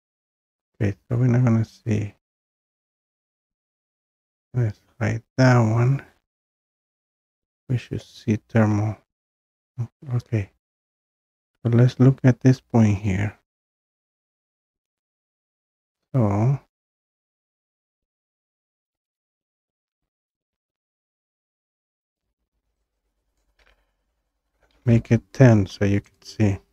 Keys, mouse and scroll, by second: 3.1 click, 3.9 click, 7.1-10.0 scroll down 7, 10.0-11.6 scroll up 8, 11.6 scroll up 1, 11.7-13.7 scroll down 1, 13.7-14.5 scroll down 3, 14.5-15.1 scroll, 17.0 click, 17.2 click, 18.9 click, 19.2 click, 22.2 click, 23.4 click, 24.6 typing, 26.2 click.